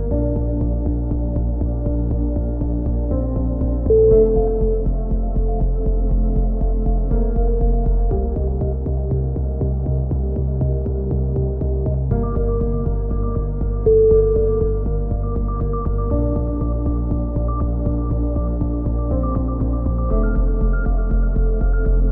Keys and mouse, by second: 0.4 alt+m, 0.4 right click, 1.4-2.6 right drag, 2.2 alt+m, 2.8 a, 3.1 z, 3.3 z, 3.5-5.3 drag, 5.0 KP_3, 5.3 z, 6.8 middle click, 7.1-8.1 middle drag, 7.1-9.0 typing, 9.4 click, 11.9 middle click, 12.2 click, 12.6 KP_3, 13.0 z, 15.3 click, 16.1 middle click, 16.3-17.7 drag, 17.3 alt+m, 18.0 click, 18.6 middle click, 18.8-19.8 drag, 19.3 alt+m, 19.9-22.1 typing, 21.7 click.